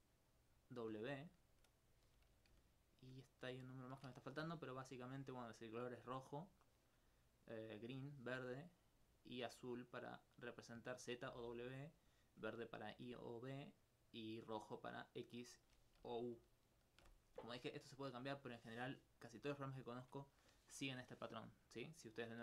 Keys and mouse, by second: 5.9 click, 6.2 d, 7.3 click, 7.7 click, 7.8 d, 8.8 d, 10.3 click, 10.9 click, 12.5 click, 14.8 click, 18.3-19.8 middle drag, 20.5 d.